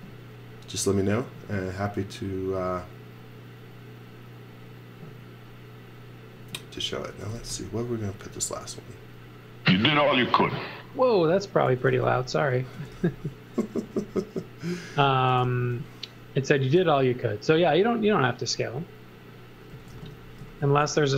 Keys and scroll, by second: 6.9-8.3 typing, 11.7 x, 12.1 v, 12.6 x, 12.9 v, 15.0-16.4 typing, 19.5-21.1 typing.